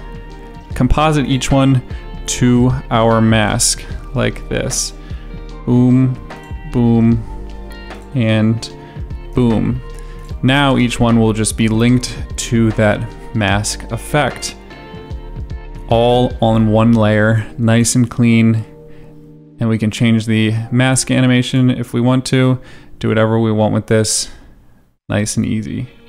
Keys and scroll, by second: 17.6 space, 20.7 space, 25.0 ctrl+z.